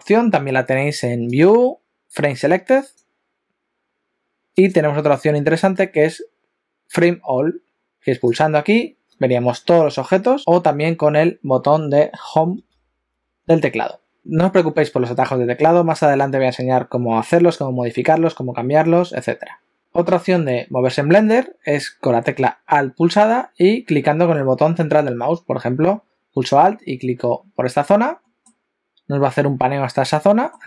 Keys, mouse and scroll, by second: 1.3 click, 4.6 click, 10.4 click, 10.4-12.1 scroll up 3, 28.2 alt+middle click, 30.4 alt+middle click.